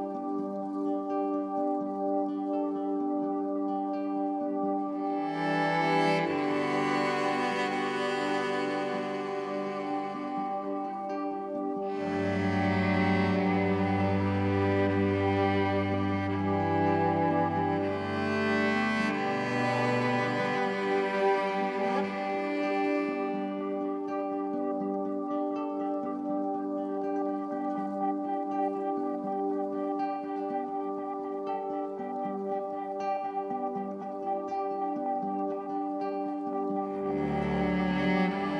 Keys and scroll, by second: 16.0 ctrl+t.